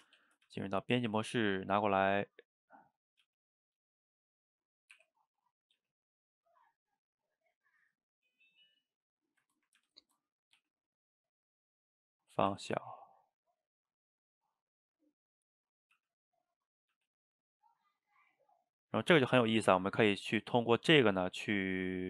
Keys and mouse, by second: 0.2 a, 0.5 g, 3.3 g, 5.0 r, 5.8 g, 8.6 shift+middle click, 9.4 click, 9.8 ctrl+x, 10.4 click, 10.6 g, 15.8 click, 15.9 g, 16.9 click, 16.9 g, 19.0 click, 19.3 g, 20.7 click, 21.3 g.